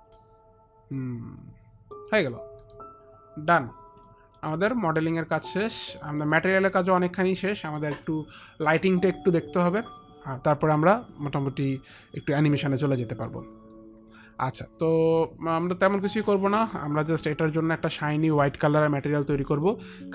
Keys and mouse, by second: 1.4 click, 1.4 middle click, 2.2 middle click, 2.8 middle click, 3.7 click, 4.2 alt+click, 7.1 alt+click, 7.5 alt+middle click, 9.5 alt+middle click, 16.1 click, 18.3 click.